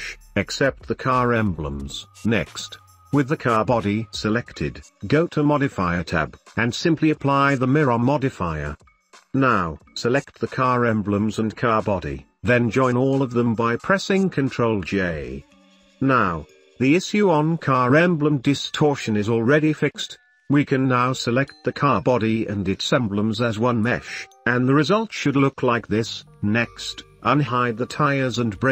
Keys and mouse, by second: 0.0 middle click, 0.4 g, 2.1-2.6 drag, 3.0-3.4 shift+drag, 6.2 click, 7.8-9.3 drag, 11.0 middle click, 11.2 shift+middle click, 11.6 shift+middle click, 11.9 middle click, 12.1 shift+middle click, 13.0 shift+middle click, 13.7 middle click, 14.0 shift+middle click, 14.7 ctrl+j, 15.2 middle click, 15.2 click, 15.5 shift+click, 17.1 middle click, 18.3 middle click, 18.7 shift+middle click, 19.5-19.8 middle drag, 20.2 shift+middle click, 22.2 middle drag, 22.8 shift+middle click, 23.2 middle click, 23.7 middle click, 24.2 g, 25.5 middle click, 26.0 g, 27.4 middle click, 27.8 middle click, 28.4-28.7 shift+middle drag.